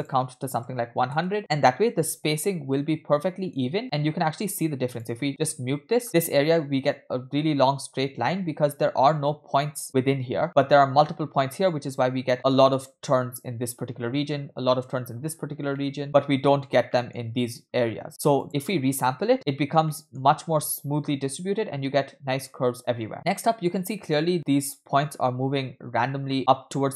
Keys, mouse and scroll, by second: 0.0-1.2 drag, 0.9 0, 4.9 click, 5.5 m, 15.4-15.7 scroll up 2, 15.7 shift+middle drag, 16.0-16.6 scroll up 1, 16.7 scroll down 2, 16.9 shift+middle drag, 18.4 click, 19.2 m, 19.9-20.2 shift+middle drag, 23.3-24.2 middle drag, 24.3 scroll down 1, 25.2-26.2 scroll up 2, 26.3 middle drag.